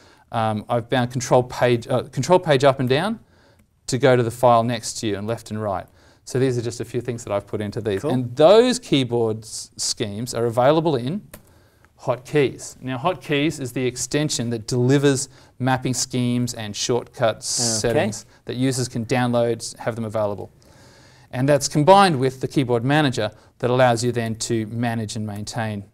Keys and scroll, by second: 2.8 ctrl+Page_Up, 3.5 ctrl+Page_Down, 4.0 ctrl+Page_Down, 4.7 ctrl+Page_Up, 5.2 ctrl+Page_Up, 5.8 ctrl+Page_Down, 8.6 alt+Tab, 23.0 ctrl+shift+Tab, 24.2 alt+t.